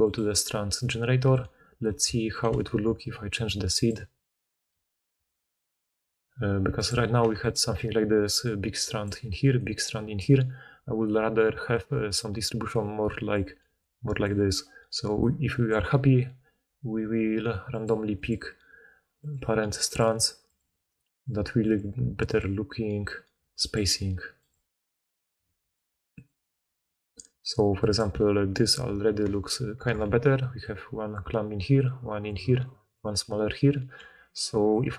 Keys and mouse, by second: 0.1-1.7 drag, 1.7-3.7 ctrl+middle drag, 2.4 ctrl+c, 3.7-7.5 drag, 7.5-8.4 middle drag, 8.1-15.2 typing, 8.4-13.4 drag, 10.4-13.4 middle drag, 10.4-13.4 right drag, 17.1 d, 30.0 d, 30.4 d, 30.5 d, 34.1 d, 34.7 d, 34.7 d.